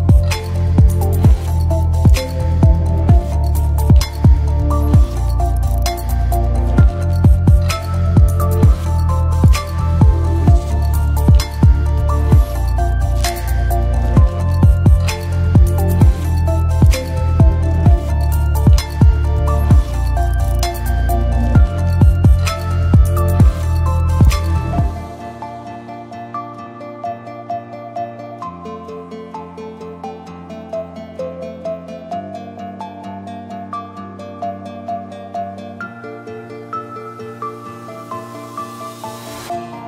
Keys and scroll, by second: 0.3 0, 2.4 space, 5.5 space, 6.9-7.9 typing, 12.9-13.7 typing, 17.3-18.2 typing, 31.2 h, 39.2-39.8 typing.